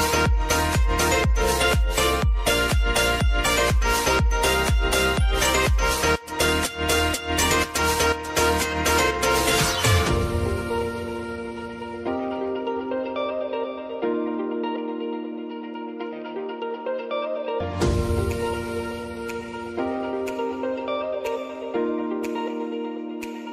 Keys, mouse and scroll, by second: 0.8 click, 1.4 space, 5.1 click, 6.0 right click, 6.7 click, 11.2 right click, 13.0 click, 13.5 ctrl+a, 14.4-19.6 drag, 19.9 u, 20.8 scroll down 1, 22.2 ctrl+y.